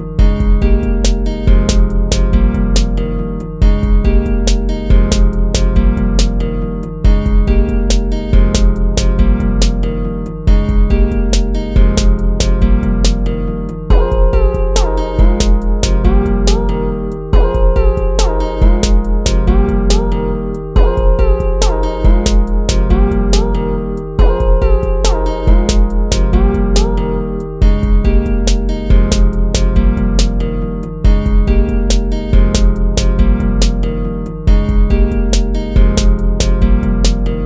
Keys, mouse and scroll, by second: 0.4 ctrl++, 2.1 ctrl+-, 4.7 ctrl++, 11.1 ctrl+-, 11.4 ctrl++, 12.0 ctrl++, 12.7 ctrl+-, 14.0 ctrl+-, 17.2 ctrl+-, 19.8 right click, 20.0 right click, 21.4 BackSpace, 22.0 ctrl+z, 22.2 BackSpace, 23.3 ctrl+-, 24.8 ctrl+-, 26.8 ctrl+-, 27.3 ctrl++, 27.6 ctrl++, 27.9 ctrl++, 28.4 ctrl+-, 31.5 right click, 31.8 BackSpace, 32.7 BackSpace, 33.1 ctrl+z, 34.8 BackSpace, 35.0 BackSpace, 35.9 BackSpace, 37.0 BackSpace, 37.2 BackSpace.